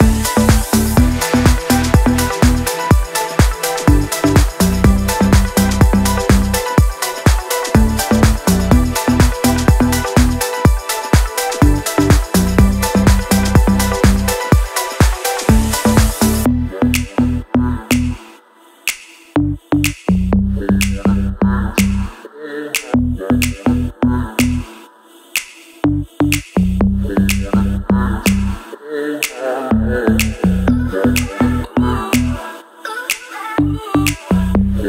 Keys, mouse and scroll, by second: 0.5 r, 1.1 click, 1.5 scroll up 1, 6.3 click, 7.5 shift+right click, 7.8 click, 9.0 ctrl+a, 9.5-13.0 typing, 14.1 typing, 14.3-14.7 scroll down 1, 15.1 shift+click, 16.1 l, 16.5 click, 18.9 click, 22.6 r, 22.9 click, 24.5 l, 24.7 click, 32.0 p, 32.6 click, 34.7-34.8 typing.